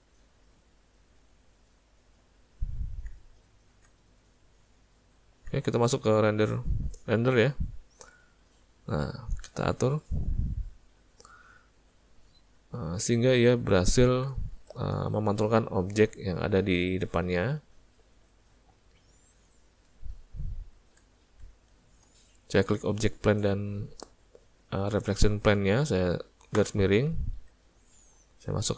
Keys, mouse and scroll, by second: 0.4 click, 3.2 z, 4.4 middle click, 5.6 z, 8.1 click, 11.8 middle click, 14.6 shift+middle click, 16.1 middle click, 17.4 middle click, 18.7 middle click, 19.3 middle click, 21.3 shift+click.